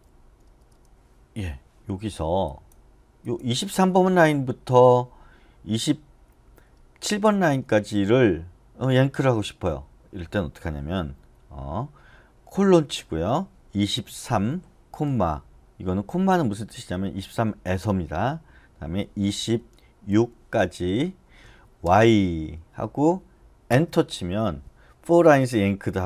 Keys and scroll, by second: 0.4 k, 0.7 k, 13.9-14.2 typing, 18.9-20.1 typing, 21.6-22.3 typing.